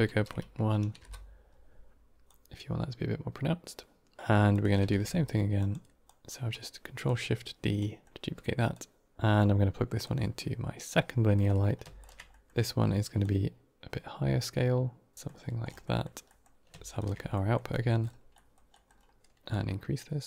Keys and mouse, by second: 2.1-4.2 drag, 4.4 click, 4.8 ctrl+shift+d, 5.9 click, 6.9 click, 8.6 click, 9.9-10.8 drag, 11.2 middle click, 11.9 ctrl+shift+click, 12.2 middle click, 13.1-15.1 shift+drag, 15.7 middle click, 16.2 middle click, 16.9 ctrl+shift+click, 17.2 middle click, 17.6 middle click, 18.2 middle click, 18.6 middle click, 19.4 click.